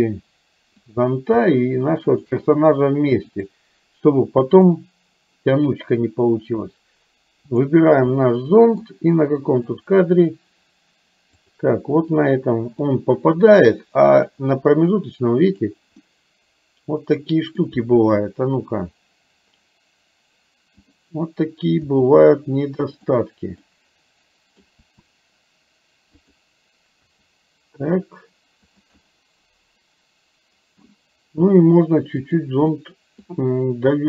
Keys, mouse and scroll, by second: 0.8 click, 2.2 shift+click, 3.3-4.7 drag, 8.2 middle click, 9.8 click, 11.5 click, 12.3 middle click, 14.3 click, 15.0 click, 16.1-17.6 middle drag, 21.0 click, 22.0 r, 23.7-24.7 middle drag, 25.0 r, 27.1 g, 29.0-30.8 middle drag, 30.8-31.4 scroll down 1, 32.7 middle click.